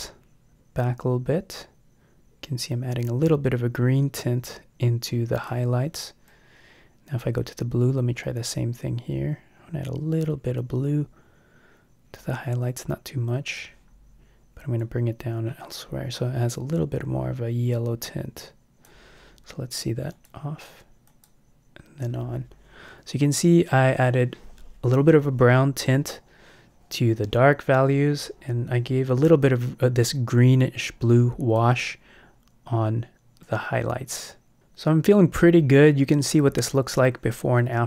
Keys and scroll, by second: 32.3 Home.